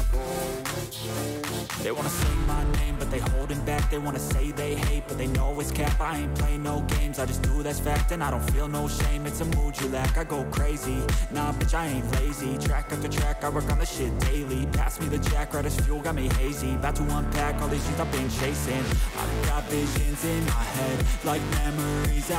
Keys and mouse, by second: 0.0 click, 2.1-3.8 drag, 6.9 click, 7.3 shift+click, 8.2 click, 10.1-11.6 drag, 14.2-15.8 drag, 17.3 click, 18.2 click, 19.0-20.5 drag, 21.2 click, 22.0 alt+shift+click.